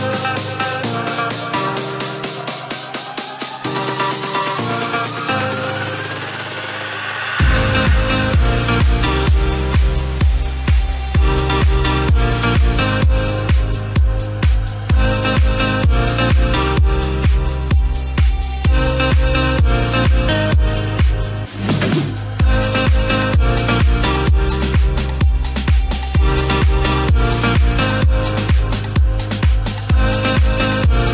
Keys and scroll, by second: 2.0 ctrl+t, 15.8 ctrl+t.